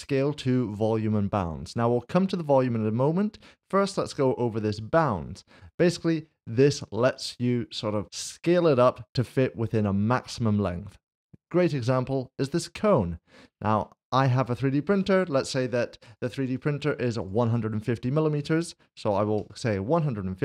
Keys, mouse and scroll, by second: 11.4 click, 16.0 click, 19.1 typing.